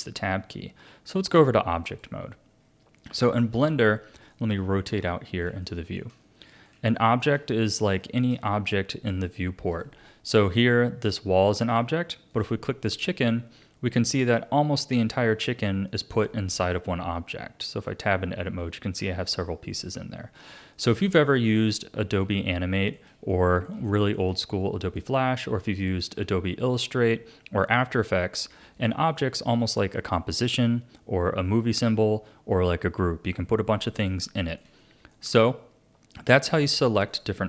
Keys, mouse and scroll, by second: 2.6-3.1 scroll down 4, 3.1 a, 4.3-9.7 middle drag, 9.7 click, 11.6-12.3 scroll up 2, 12.3 click, 15.3-15.9 scroll up 3, 15.9-17.6 middle drag, 17.6 Tab, 17.8 Tab, 18.4 a, 19.0 a, 19.3 Tab, 19.7 Tab, 20.0-20.4 scroll down 3, 20.4 a, 20.7 middle click, 21.7-22.3 scroll up 1, 22.3-27.5 shift+middle drag, 28.2-28.7 scroll up 1, 28.7 click, 34.1-35.7 middle drag, 35.7-36.5 scroll down 2, 36.5 click, 37.1 click.